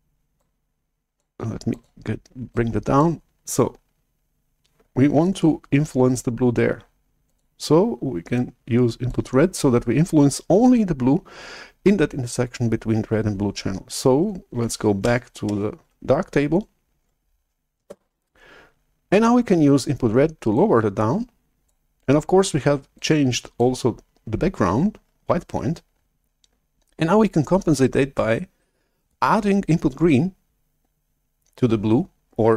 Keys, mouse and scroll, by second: 0.3 click, 1.6 click, 2.4 click, 3.3-5.3 drag, 7.2-11.5 drag, 16.0 alt+Tab, 17.8 shift+super+F1, 20.5-21.6 drag, 22.9 click.